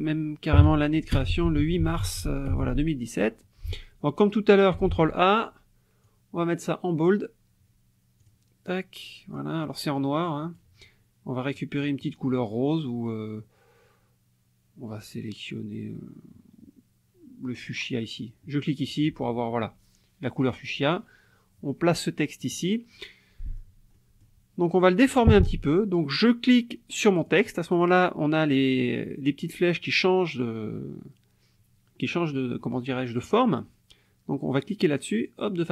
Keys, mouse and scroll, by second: 0.6-2.5 typing, 4.9 ctrl+a, 6.0-7.2 drag, 8.2 click, 9.3-10.7 drag, 18.9 click, 20.9-22.6 drag, 23.4 click, 23.9 click, 27.2 click, 32.6 click, 34.7-35.7 drag.